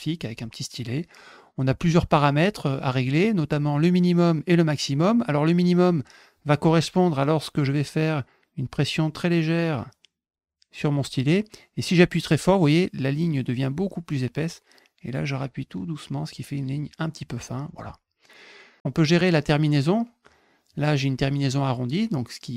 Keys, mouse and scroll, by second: 9.6-16.6 drag.